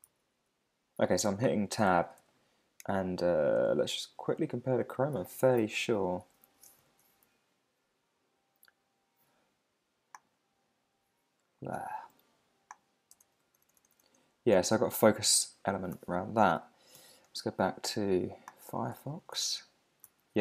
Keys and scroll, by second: 0.1 super+z, 1.8 Tab, 3.6 super+Tab, 6.1 super+n, 6.8 shift+super+h, 13.1 Tab, 16.9 super+h, 18.9 Tab, 20.0 super+z.